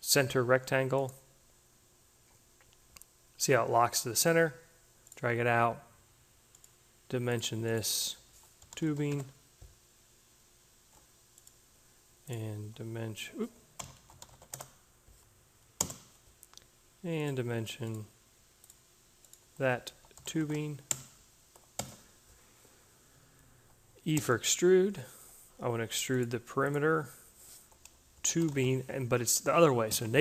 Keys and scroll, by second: 5.0 d, 7.9-9.3 typing, 12.5 d, 13.5-14.8 typing, 19.3-20.9 typing, 24.0 e, 27.5-29.0 typing, 29.1 Home.